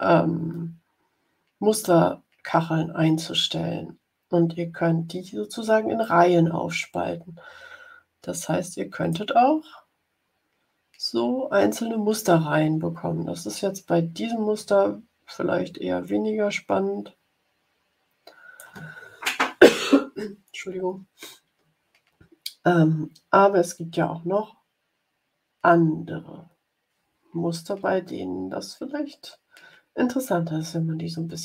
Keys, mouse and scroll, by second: 5.9-9.2 drag, 14.5-18.7 drag.